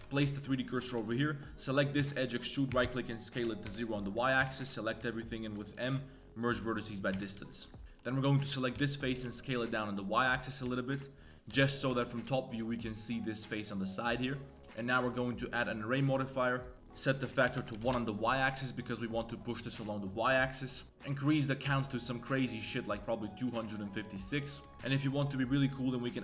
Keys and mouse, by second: 0.9 2, 1.0 click, 1.2 click, 2.0 e, 2.7 s, 4.0 middle click, 4.4 a, 5.8 m, 7.1-8.7 typing, 7.5 middle drag, 8.1 click, 8.3 middle click, 10.6 z, 10.8 middle click, 11.5 KP_7, 11.9 Tab, 14.3 Tab, 14.5 click, 14.5 Tab, 14.5 a, 15.2-16.7 drag, 17.0 click, 18.7 middle drag, 19.1 middle click, 21.3-23.8 drag, 24.5 middle click.